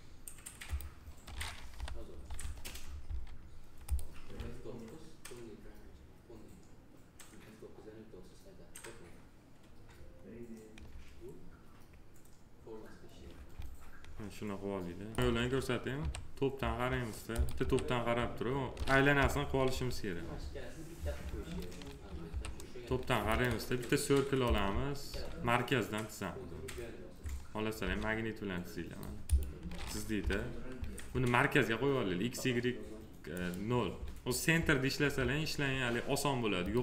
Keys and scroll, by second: 1.6 p, 2.9 s, 15.9 t, 17.5 t, 19.0 p, 22.1 t, 24.9 s, 27.7 s, 30.0 p.